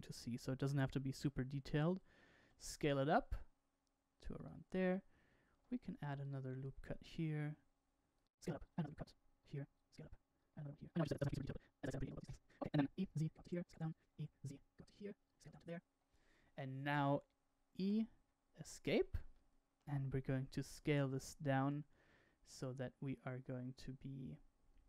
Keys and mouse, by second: 2.3 s, 5.4 ctrl+r, 8.6 s, 9.4 ctrl+r, 10.6 ctrl+r, 12.2 alt+click, 12.9 e, 13.6 s, 14.3 e, 15.6 s, 17.7 e, 19.3 shift+middle click, 20.7 5.